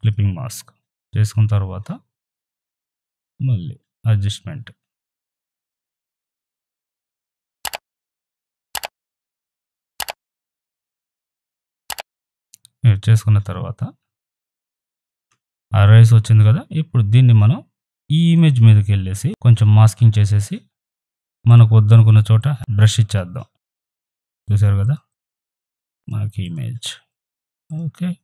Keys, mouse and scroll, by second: 0.0 click, 2.6 click, 4.1 click, 5.4-11.0 drag, 11.0 ctrl+z, 11.3 click, 14.0 ctrl+Num_Lock, 14.0 click, 14.3 ctrl+z, 18.3 click, 19.2 ctrl+z, 20.4-28.2 drag.